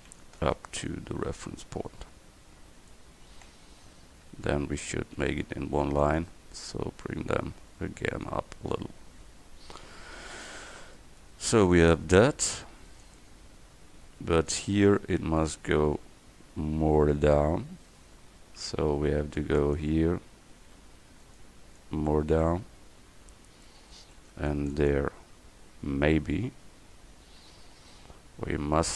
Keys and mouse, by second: 0.0 c, 3.4 a, 5.2 c, 11.7 Tab, 18.0 Tab, 18.8 a, 19.2 c, 19.7-21.7 drag, 20.9 c, 24.0 a, 24.3 c, 25.7-27.2 drag.